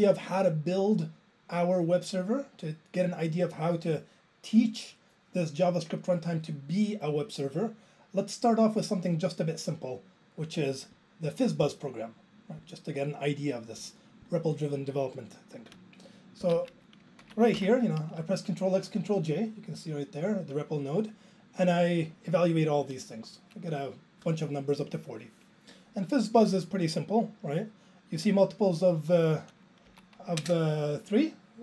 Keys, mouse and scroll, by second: 16.4 Left, 16.5 Right, 17.8 ctrl+j, 29.9 Right, 30.4 alt+space.